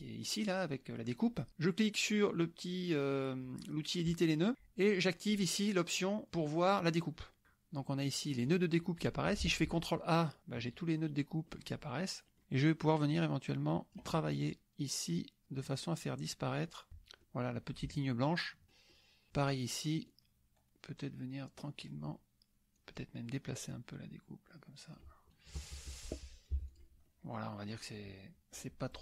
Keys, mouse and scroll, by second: 4.1 click, 7.4 click, 8.6 click, 9.5 ctrl+a, 11.7 click, 12.3 click, 12.9-14.7 drag, 15.6-17.4 drag, 17.6 click, 18.7 click, 20.1 click, 20.7 9, 22.2 click, 22.8 click, 23.7-25.2 drag, 25.4 KP_Subtract, 26.6 F1, 26.7 click, 27.1 click, 28.4 click.